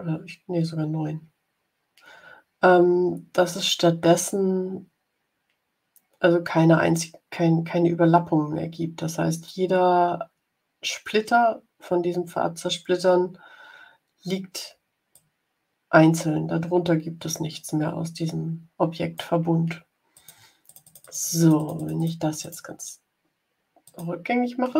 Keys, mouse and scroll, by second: 15.0-19.2 drag, 20.0 click, 20.5-22.1 drag, 22.3 click, 23.8 click.